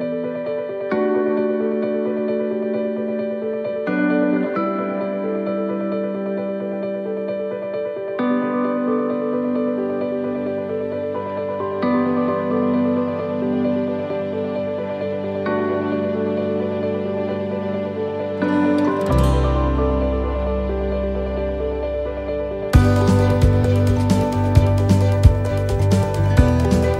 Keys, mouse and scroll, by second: 0.8 click, 1.7 right click, 2.5 click, 3.5 middle click, 4.1 scroll down 2, 5.3 a, 6.0 middle click, 8.3 ctrl+r, 9.9 s, 12.4 ctrl+r, 13.7 s, 14.9 middle click, 15.3 scroll down 2, 15.7 middle click, 16.1-16.6 scroll up 3, 16.8 middle click, 17.1 scroll down 2, 18.3 a, 19.6 click, 21.8 shift+d, 22.9 click.